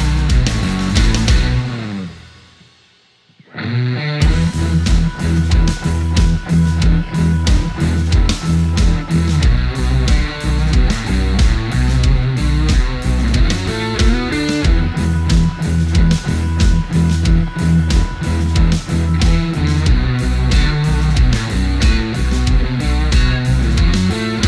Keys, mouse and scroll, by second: 3.8 click, 7.5 click, 11.2 click, 15.9 shift+right click, 16.8-21.0 shift+drag, 21.0 shift+right click, 21.6 click.